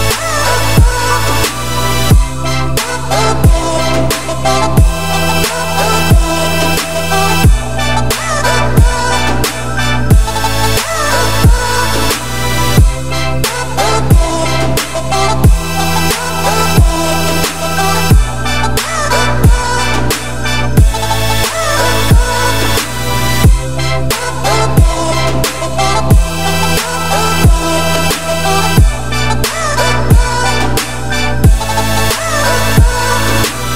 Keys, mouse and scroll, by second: 0.8 Tab, 1.1 middle click, 1.6 click, 2.4 shift+click, 2.8 middle click, 3.4 shift+click, 3.9-5.0 middle drag, 5.9-6.5 scroll up 2, 6.5 shift+d, 7.9 p, 8.6 Tab, 8.9 middle click, 9.3 click, 9.8 Tab, 10.0 middle click, 10.3 a, 10.6 s, 16.7-18.3 scroll up 1, 18.3 scroll up 1, 18.4 1, 18.8 z, 19.4 click, 19.7 z, 21.5 g, 27.6 a, 28.3 f, 28.8 middle click, 29.5 ctrl+z, 29.9 click, 30.8 shift+click, 31.3 shift+click, 32.4 shift+click, 33.3 f, 33.6 click.